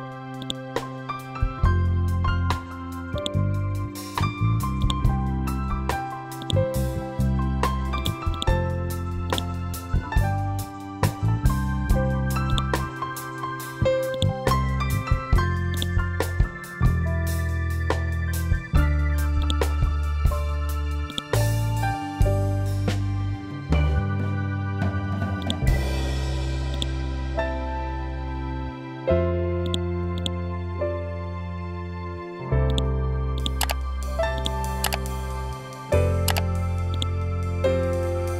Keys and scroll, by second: 10.3 Delete, 28.3 ctrl+Home, 31.3 ctrl+z.